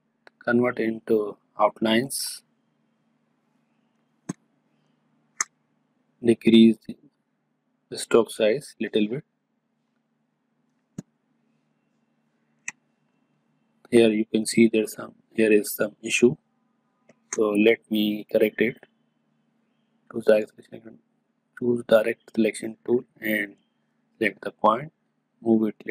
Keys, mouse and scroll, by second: 2.8 click, 4.0 space, 4.3-5.6 ctrl+drag, 6.1 click, 9.1 click, 10.7 space, 11.0-13.4 ctrl+drag, 13.7 ctrl+click, 16.5-25.9 ctrl+drag.